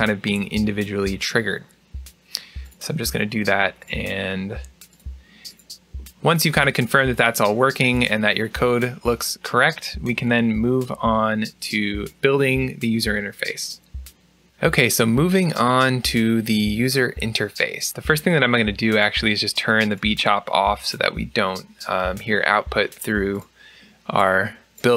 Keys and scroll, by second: 0.1 BackSpace.